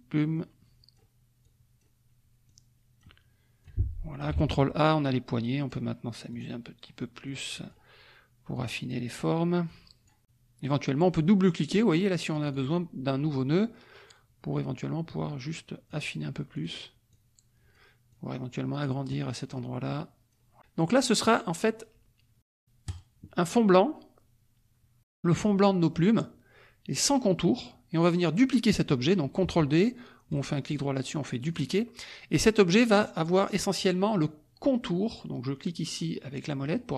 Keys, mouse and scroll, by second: 0.3 click, 1.4 click, 2.4 click, 3.6 click, 4.3 ctrl+a, 5.2 click, 6.3 click, 6.3-7.0 scroll down 2, 7.2 click, 7.9-8.5 scroll down 1, 8.5 click, 9.3-9.6 scroll down 1, 9.6-10.8 drag, 12.4 click, 13.3-16.1 drag, 16.5 click, 17.1 click, 18.1 click, 19.0 click, 19.8 click, 22.9 click, 27.4-28.6 drag, 30.3 right click, 31.4 click, 36.6 click.